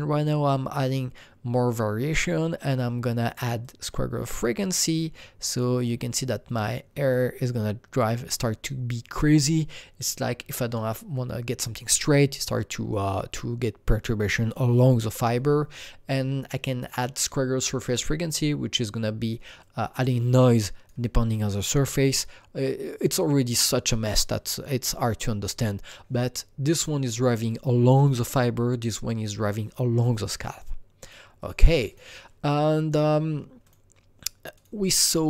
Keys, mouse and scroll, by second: 19.6-23.5 drag, 31.0 click, 31.4 click, 31.8 click, 33.6 click.